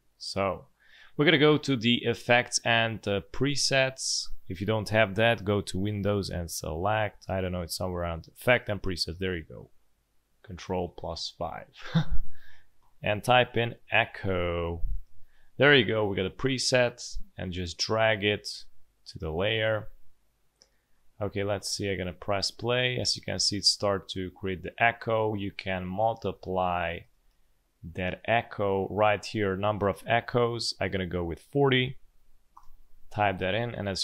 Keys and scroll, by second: 13.3-14.7 typing, 21.6 space, 22.7 space, 25.3 space, 26.1 space, 27.0 space, 27.2 space, 31.7 4, 32.1 0, 32.5 Return.